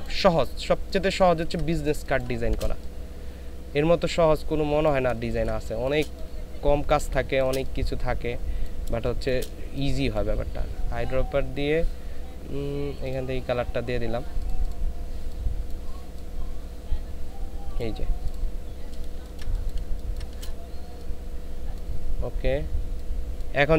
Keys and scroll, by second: 1.3 ctrl+space, 5.2 ctrl+space, 19.1 ctrl+space, 19.8 ctrl+space.